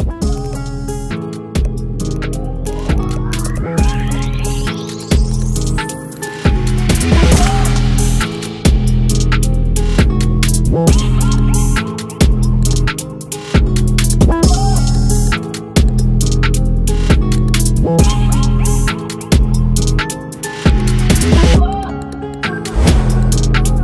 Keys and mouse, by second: 3.9 click, 4.7 click, 5.3 click, 11.2 click, 13.9 click, 15.1 click.